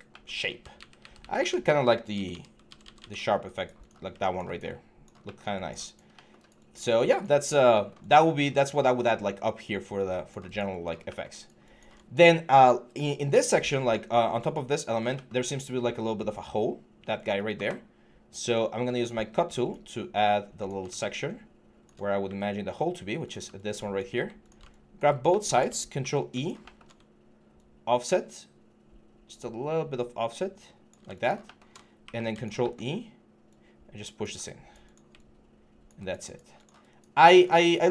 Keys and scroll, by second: 0.5 ctrl+a, 25.7 ctrl+e, 31.8 ctrl+e.